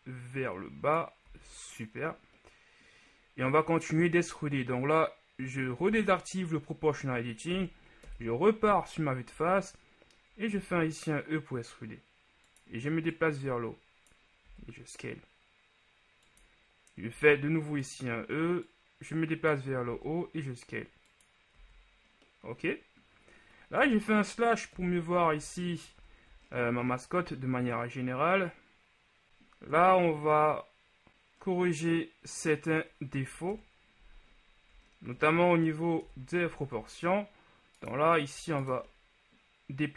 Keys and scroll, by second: 1.5 z, 8.3 KP_1, 9.5 z, 10.7 e, 10.9 z, 14.7 s, 17.4 e, 20.1 s, 21.7 z, 23.9 KP_Divide, 24.9 KP_1, 25.5 Tab, 26.1 a, 29.3 shift+Tab, 30.0 Tab, 33.8 KP_3, 36.2 KP_1, 36.9 Tab.